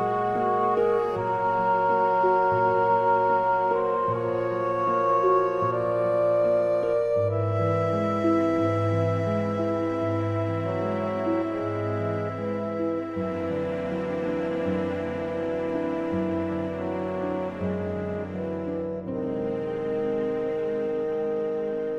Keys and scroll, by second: 16.4 super+z.